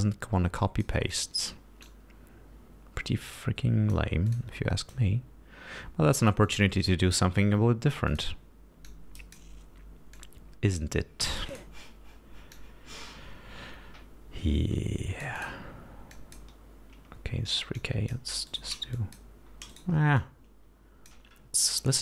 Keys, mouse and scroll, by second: 1.4 click, 2.2-4.4 drag, 4.6 click, 5.1-7.0 drag, 7.2-8.7 drag, 9.2 click, 10.5 click, 11.8 click, 12.8-15.9 drag, 16.4 click, 18.1 click, 18.8 shift+right click, 19.3 shift+click, 20.0 shift+right click, 20.5-21.6 shift+drag.